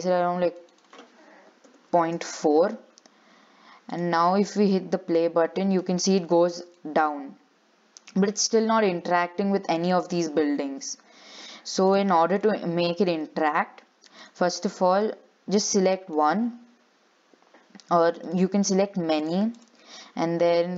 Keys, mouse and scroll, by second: 4.1-5.2 drag, 5.2 scroll down 6, 5.4-10.0 shift+middle drag, 11.5-12.5 drag, 12.5 scroll up 1, 12.6 middle click, 13.5 scroll down 6, 14.4 click, 15.6-15.9 scroll up 5, 15.9-18.4 shift+middle drag, 18.4 shift+click, 18.8 shift+click, 19.4 shift+click, 19.8 shift+click.